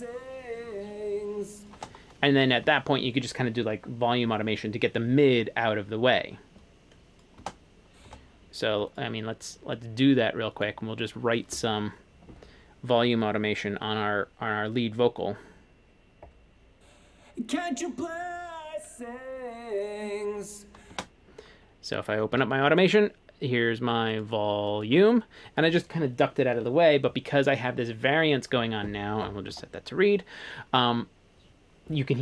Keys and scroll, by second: 1.8 space, 7.5 space, 8.2 space, 21.0 space, 22.4 a.